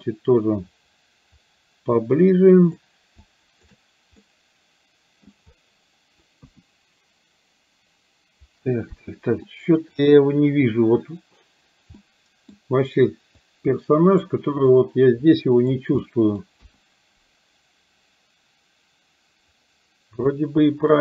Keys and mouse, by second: 2.1 shift+click, 3.2 shift+click, 4.2-5.4 middle drag, 6.5 KP_1, 9.5 middle click, 12.0 middle click, 13.4-14.4 drag, 14.7-15.7 drag, 16.1 middle click, 16.6 KP_1, 20.4 middle click.